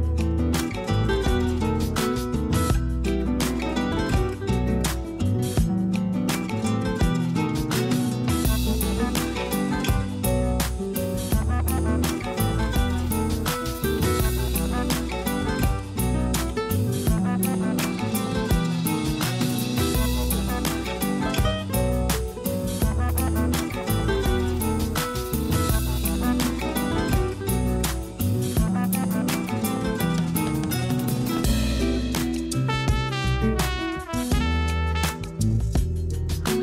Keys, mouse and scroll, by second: 0.1 i, 2.8 KP_1, 3.6 e, 5.7 shift+middle click, 6.2-6.8 scroll up 2, 6.8 e, 8.6-8.9 scroll up 1, 8.9 shift+middle click, 9.3-9.7 scroll up 3, 9.7 e, 10.6-11.2 scroll down 5, 11.2-13.4 typing, 11.5-12.1 scroll down 2, 11.7 Tab, 12.7 shift+middle click, 18.6 ctrl+alt+KP_0, 30.1 click, 31.0 click, 33.6 r.